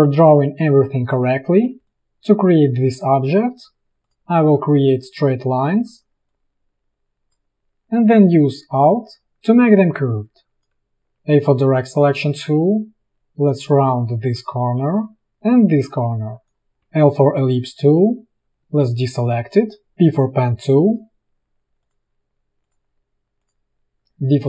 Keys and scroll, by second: 11.2 a, 16.9 l, 18.6 v, 20.1 p, 24.0 v.